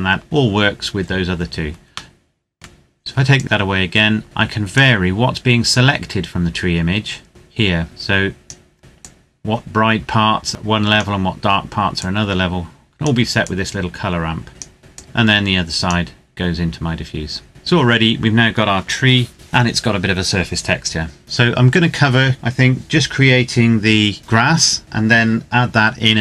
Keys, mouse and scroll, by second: 2.1 middle click, 3.4 click, 4.2-4.8 scroll up 1, 4.8 click, 14.9 click, 17.5-18.3 scroll down 1, 20.7 ctrl+Num_Lock, 20.7-21.1 scroll down 1, 21.1 ctrl+s.